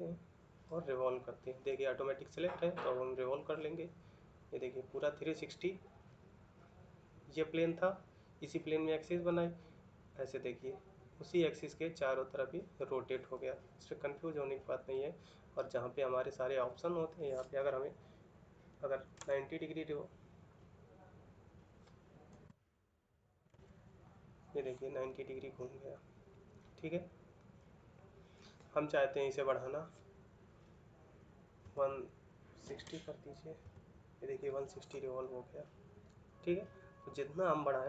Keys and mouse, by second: 4.1 middle click, 6.0 middle click, 9.2 middle click, 18.8 Page_Up, 19.1 Insert, 22.2 Num_Lock, 25.0 middle click, 27.2 middle click, 33.4 typing, 33.5 Return, 35.1 middle click.